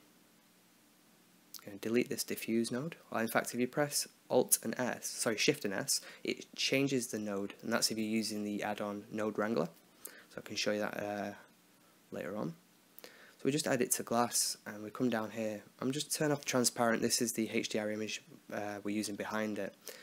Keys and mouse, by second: 0.8-2.5 right drag, 2.5 shift+s, 10.1 click, 10.8-13.1 middle drag, 13.1-14.3 drag, 14.3-15.8 middle drag, 15.8 click, 16.7 click, 17.5 KP_5, 17.6 middle click.